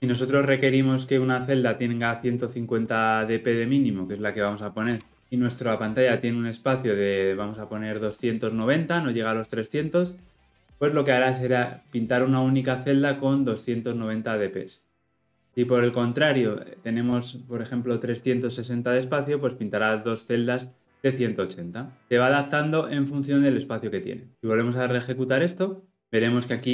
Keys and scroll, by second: 24.3 shift+F10.